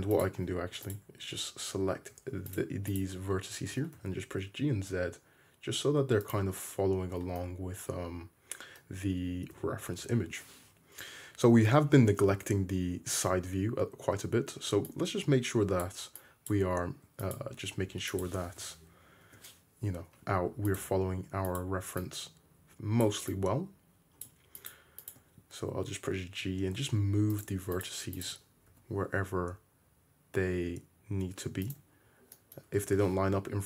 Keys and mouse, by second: 0.2 middle click, 0.9 click, 3.4 middle click, 3.7 g, 4.1-6.7 middle drag, 7.0-14.9 middle drag, 9.6 `, 10.1 `, 12.6 alt+z, 14.9-16.6 drag, 16.6 middle click, 17.2 click, 17.4 middle click, 18.1-20.8 drag, 18.6 g, 20.8 middle click, 21.5 click, 21.6 middle click, 22.1-24.7 drag, 24.7-27.8 shift+middle drag, 25.7 g, 27.8 click, 27.9-33.6 shift+middle drag, 32.8 `.